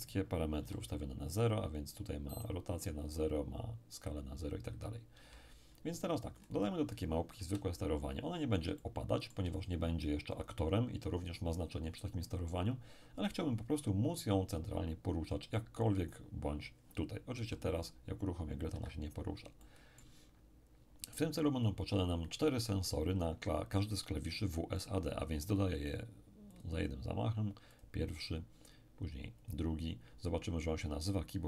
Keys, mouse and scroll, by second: 0.6 n, 1.8-2.9 scroll down 1, 2.9-4.7 scroll down 3, 5.2 n, 5.9-6.4 scroll up 2, 6.4-7.4 scroll down 2, 7.4 scroll down 1, 7.4 KP_7, 8.8 shift+middle click, 9.3 shift+click, 17.4 p, 18.7 Escape, 19.6-21.0 middle drag, 24.8 click, 26.5 click, 27.7 click, 29.4 click.